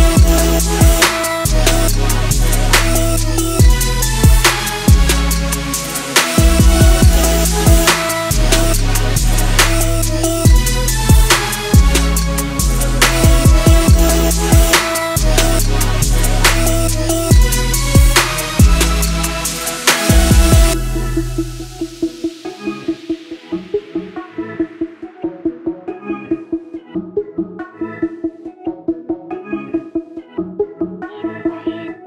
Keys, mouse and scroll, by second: 14.6 click, 19.5 click, 22.0 click, 24.3 click, 26.2 ctrl+s, 27.5-30.4 drag.